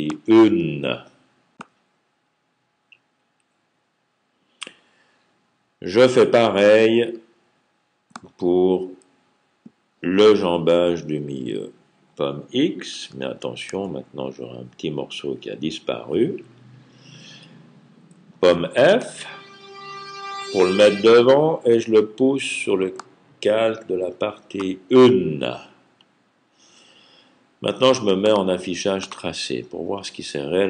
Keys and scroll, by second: 13.5 super+x, 18.8 super+f.